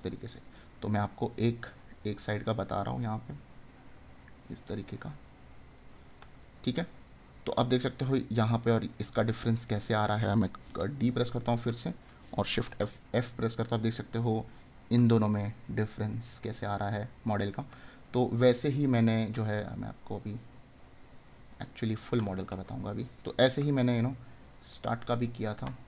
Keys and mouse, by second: 1.0 right click, 6.1 right click, 11.6 right click, 17.7 right click, 21.6 right click.